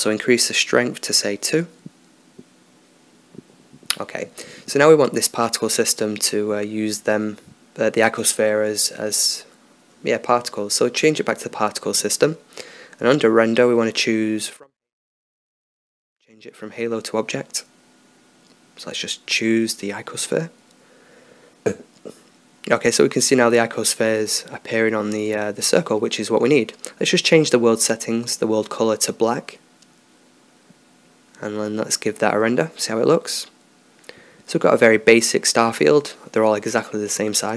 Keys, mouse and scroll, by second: 2.1-6.6 drag, 6.6-10.2 middle drag, 7.5-13.0 right drag, 10.2-11.6 drag, 11.6 middle click, 12.5-16.2 drag, 17.4-19.6 drag, 20.3-21.9 drag, 22.9 scroll up 1, 23.5-25.5 middle drag, 25.5-27.0 drag, 27.2-28.7 drag, 29.5-31.1 drag, 33.1 click.